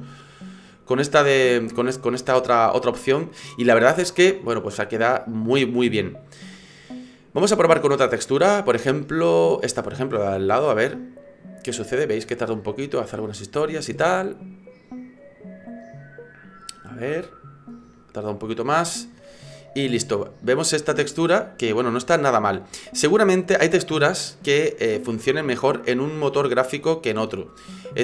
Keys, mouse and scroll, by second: 7.1 click, 19.6-20.6 scroll up 10, 20.8 middle click, 25.5 middle click, 27.9-28.0 scroll down 1.